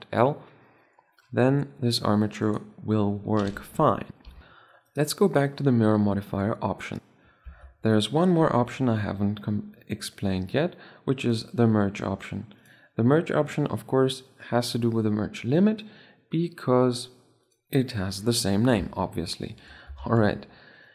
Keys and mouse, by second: 1.4 r, 5.1-6.8 right drag, 11.3-14.5 drag, 17.5 click, 19.3 shift+c, 19.9 shift+a.